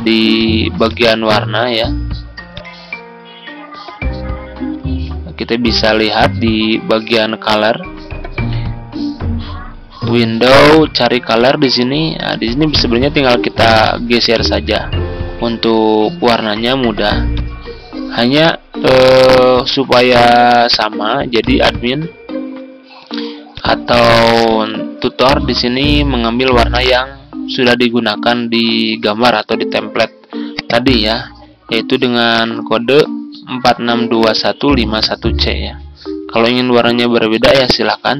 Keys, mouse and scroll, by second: 7.6-9.9 scroll down 1, 9.9-23.9 drag, 32.1 ctrl+v.